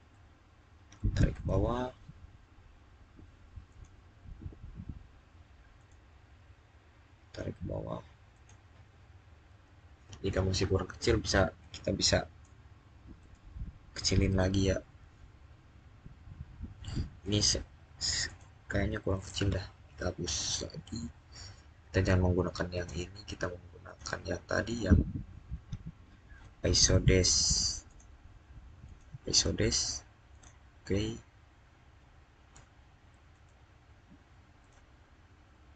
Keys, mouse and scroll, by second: 1.1 click, 3.5 click, 4.4-5.6 scroll up 1, 5.6 click, 8.1 click, 11.4 click, 17.0 click, 22.5 click, 27.7 click, 33.1 click.